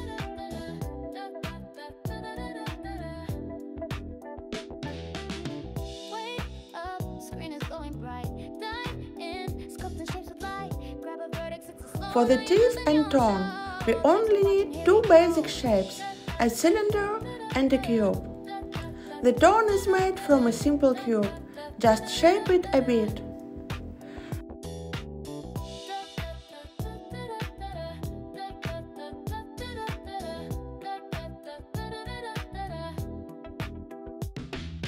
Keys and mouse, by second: 0.2 click, 2.4 click, 3.4 shift+click, 4.3 shift+click, 7.4 click, 10.1 right click, 11.3 shift+click, 19.0 s, 19.4 z, 20.4 click, 23.1 s, 23.7 x, 26.0 s, 28.5 click, 29.6 right click, 31.7 click, 32.9 click, 34.2 click, 34.5 click.